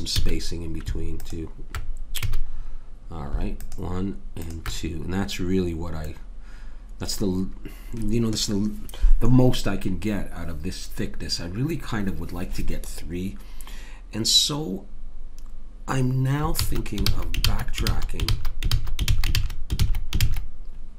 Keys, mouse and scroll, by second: 0.2 a, 2.3 a, 6.7-8.2 middle drag, 16.6 ctrl+z, 17.0 ctrl+z, 17.4 ctrl+z, 17.9 ctrl+z, 18.3 ctrl+z, 18.7 ctrl+z, 19.1 ctrl+z, 19.4 ctrl+z, 19.8 ctrl+z, 20.2 ctrl+z.